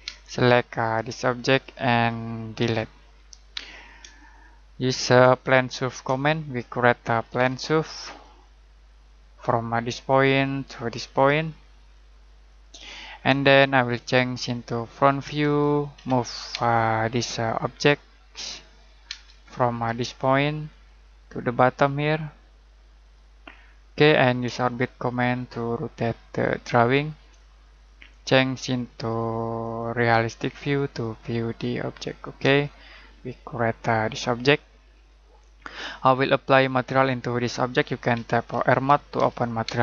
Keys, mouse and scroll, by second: 0.0 space, 1.3 click, 2.5 Delete, 3.0-3.6 scroll down 1, 3.6 middle click, 4.0 z, 4.1 middle click, 6.1 middle click, 6.8-8.3 typing, 9.0 click, 15.9 m, 16.5 space, 17.4 click, 19.0 space, 19.3-20.2 scroll up 1, 20.2 scroll down 1, 20.4 scroll up 1, 20.6 click, 23.4-24.0 scroll down 1, 24.0 middle click, 24.6 shift+middle click, 27.3 middle click, 29.6 click, 31.5-32.4 scroll up 1, 32.6 shift+middle click, 35.4 middle click, 37.9-39.6 typing.